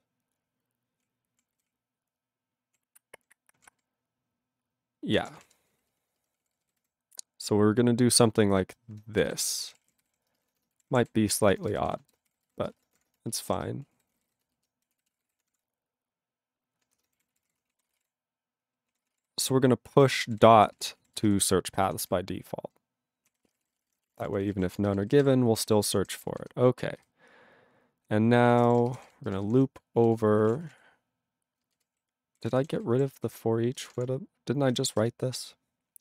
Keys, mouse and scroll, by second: 1.0 ctrl+p, 1.5 ctrl+n, 1.6-2.7 ctrl+p, 3.1 ctrl+n, 3.5 ctrl+p, 3.7 ctrl+a, 5.1 ctrl+o, 5.1-7.6 typing, 9.0-15.9 typing, 9.4 alt+b, 13.3 ctrl+b, 17.0 ", 17.2 ., 17.4 ctrl+e, 17.5 ;, 17.8 ctrl+a, 17.8 ctrl+space, 17.9 ctrl+e, 17.9 ctrl+g, 18.9 ctrl+a, 19.0 ctrl+space, 19.1 ctrl+e, 19.1 ctrl+g, 19.9 ctrl+a, 20.1 ctrl+space, 20.2 ctrl+e, 20.3 ctrl+g, 20.8 ctrl+s, 20.9 ctrl+a, 21.1 ctrl+space, 21.2 ctrl+e, 21.7 ctrl+g, 22.0 ctrl+s, 22.1-23.2 ctrl+n, 23.3 ctrl+a, 23.4 ctrl+space, 23.4 ctrl+e, 23.5 ctrl+n, 23.6 ctrl+n, 23.7 ctrl+e, 23.8 ctrl+n, 23.9 ctrl+e, 24.0 ctrl+n, 24.0 ctrl+e, 24.3 ctrl+n, 24.4 ctrl+n, 24.5 ctrl+e, 24.5 ctrl+g, 24.7 ctrl+space, 25.5 ctrl+g, 26.1 ctrl+s, 26.3 ctrl+p, 26.3 ctrl+f, 27.0 ctrl+f, 28.6 ctrl+o, 28.6 Tab, 29.0-33.9 typing, 35.6 space.